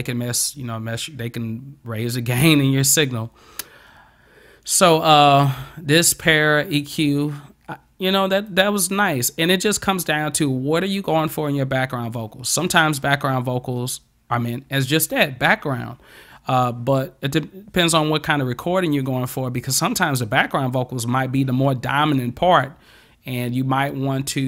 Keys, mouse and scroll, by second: 8.5-9.7 drag.